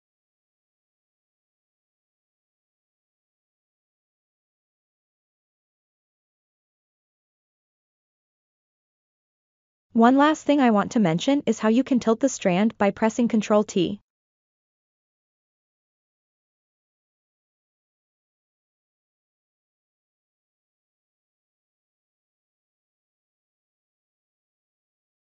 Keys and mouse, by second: 0.8-1.9 middle drag, 3.0-5.0 drag, 5.3-5.8 ctrl+middle drag, 6.0-7.3 middle drag, 7.3 click, 7.7 Tab, 8.7 ctrl+middle click, 9.9 click, 12.8 ctrl+t, 19.3-22.7 middle drag, 23.1 ctrl+t, 24.8 middle click.